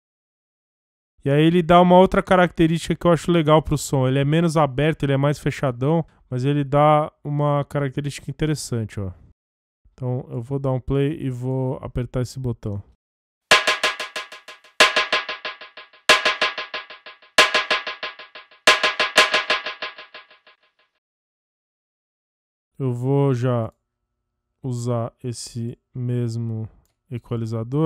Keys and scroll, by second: 12.8 space, 19.4 space.